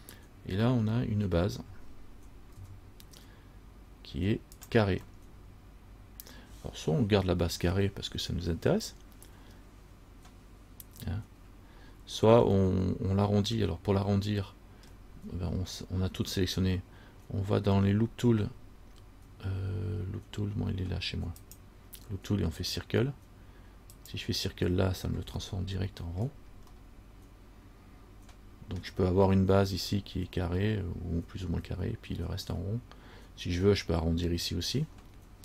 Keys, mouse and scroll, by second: 2.1-2.5 scroll down 1, 2.7 s, 5.4 middle click, 5.4 scroll up 1, 12.8 middle click, 15.0-15.9 scroll down 1, 18.1-21.6 scroll down 7, 21.6 click, 24.1 click, 25.6 middle click, 26.3 scroll down 1, 26.9 middle click, 29.4 scroll up 4.